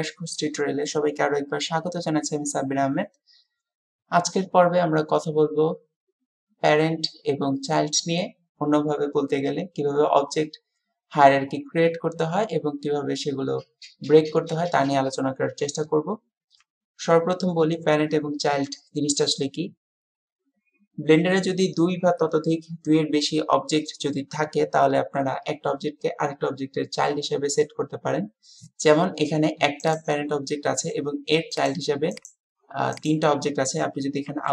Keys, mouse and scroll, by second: 31.5 click, 32.2 click.